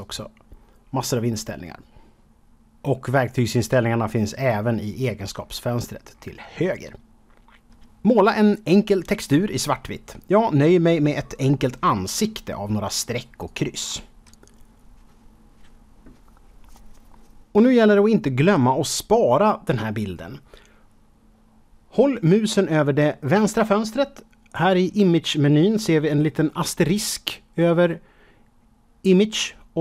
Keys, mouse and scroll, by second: 0.4-0.8 scroll up 2, 0.8 scroll down 1, 1.0-1.7 scroll up 1, 4.3-5.3 scroll down 5, 5.5 scroll up 2, 5.7-6.1 scroll down 2, 6.1-7.6 scroll up 3, 7.7 f, 8.5 click, 8.6 scroll up 1, 8.7 middle click, 9.0 KP_7, 9.3 click, 9.6 click, 9.9 click, 10.1 click, 10.4 middle click, 12.6 click, 13.4 click, 14.0 click, 14.3 click, 14.4 click, 15.0 KP_0, 15.3 scroll up 4, 15.6 KP_Decimal, 16.0 scroll down 2, 16.2 scroll up 1.